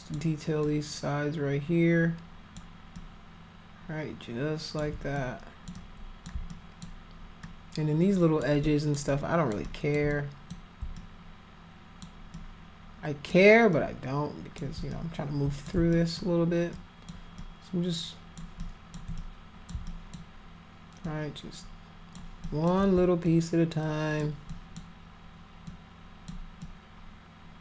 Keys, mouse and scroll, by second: 0.6-2.5 alt+drag, 2.9-4.8 alt+drag, 5.1 click, 5.7 click, 6.5 alt+click, 7.4 alt+click, 8.6 alt+click, 9.1 alt+click, 9.6 alt+click, 10.1 click, 11.0-12.0 alt+drag, 12.3 alt+click, 13.7 alt+click, 14.9 click, 15.9 alt+click, 16.7 alt+click, 17.3-18.4 alt+drag, 18.5 alt+click, 19.2 click, 19.8 alt+click, 21.0-22.1 alt+drag, 22.4 alt+click, 23.2 alt+click, 24.5 alt+click, 25.6 alt+click, 26.6-27.6 alt+drag.